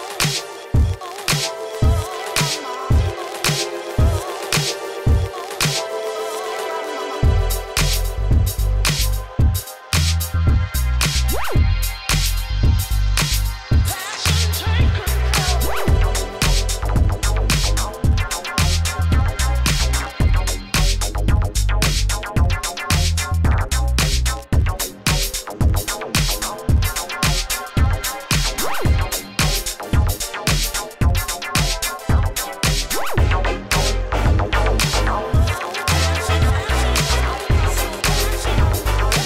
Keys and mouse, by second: 0.7 g, 1.7 g, 3.3 middle click, 3.8 Tab, 4.1 middle click, 6.1 Tab, 6.8 click, 7.2 ctrl+e, 7.5 Tab, 8.4 Tab, 8.6 ctrl+e, 9.5 Tab, 10.9 ctrl+s, 13.5 Tab, 14.5 middle click, 14.8 q, 15.0 click, 15.1 g, 15.5 middle click, 15.8 click, 15.8 g, 16.2 middle click, 16.9 click, 17.0 middle click, 17.9 KP_1, 18.4 Tab, 18.9 h, 19.5 g, 20.6 g, 20.9 Tab, 21.4 a, 21.6 a, 21.8 ctrl+f, 25.2 Tab, 25.2-26.9 drag, 25.3 Tab, 27.3 Tab, 27.9 Tab, 28.7 ctrl+e, 29.7 ctrl+e, 29.9 Tab, 32.1 Tab, 32.4 a, 33.9 a, 34.2 ctrl+f, 34.7 Tab, 35.1-35.5 middle drag, 36.5-37.2 middle drag, 37.2 ctrl+s, 37.5 g.